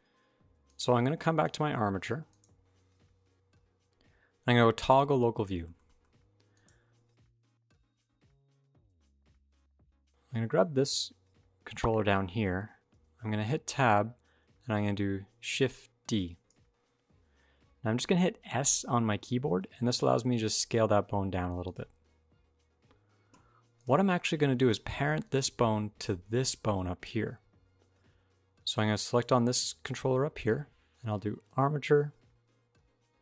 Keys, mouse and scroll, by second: 0.5 click, 1.2 click, 2.1 click, 8.4 shift+middle click, 9.3 click, 12.7 Tab, 16.7 click, 23.5 click, 24.6 d, 25.0 click, 25.8-26.3 d, 26.3 click, 26.9 d, 26.9 d, 28.8 shift+click, 31.3 click.